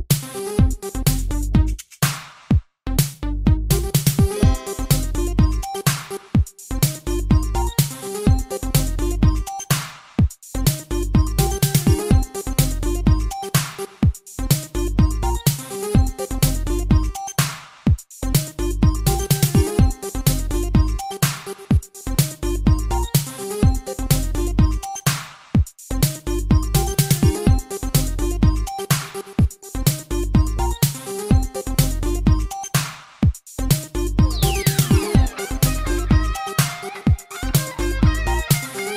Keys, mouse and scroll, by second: 10.5 r, 11.7 click, 11.8 click, 12.6 click, 13.3 click, 14.2 typing, 14.8 click, 15.0 click, 15.5 click, 22.8 ctrl+c, 23.3 Up, 24.2 ctrl+v, 25.0 Down, 25.4 Right, 25.7 Right, 25.9 Right, 30.7 Left, 31.0 Left, 31.7 Right, 32.0 Right, 32.5 Right, 35.0 click, 35.8 g, 36.4 click, 36.8 click, 38.0 shift+space.